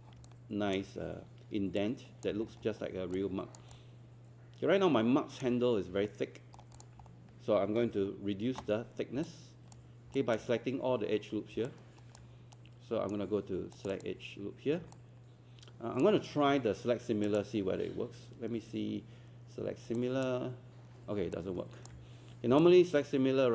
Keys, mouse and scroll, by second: 0.3 alt+click, 1.8 alt+click, 2.5-3.1 scroll down 2, 3.7-5.8 alt+drag, 5.8 scroll up 1, 6.1 alt+middle click, 6.8 click, 7.1 alt+middle click, 9.3 alt+click, 10.2 alt+click, 11.7 alt+click, 12.6 right click, 13.8 click, 15.0 alt+click, 17.3-21.0 drag, 21.4 alt+click, 22.6 alt+click.